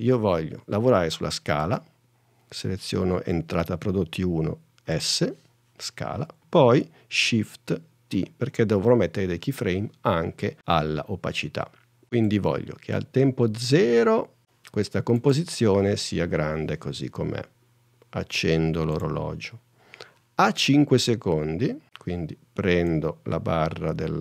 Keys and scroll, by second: 5.0 s, 8.3 shift+t.